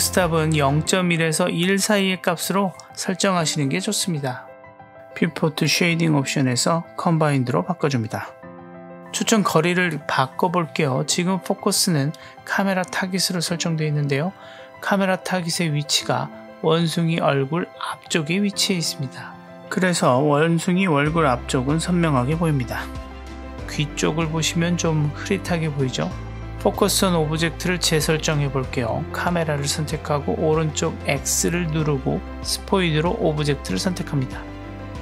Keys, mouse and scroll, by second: 0.3-1.7 drag, 4.5 click, 5.8-8.7 drag, 8.7-9.3 middle drag, 9.4-9.8 scroll down 1, 9.8-10.5 middle drag, 12.0 click, 13.4 click, 14.7 KP_3, 15.7 z, 18.1-18.7 scroll up 1, 18.7-20.2 scroll down 1, 20.2-21.5 drag, 26.7-27.8 drag, 29.1 click, 31.6 click, 32.6 click.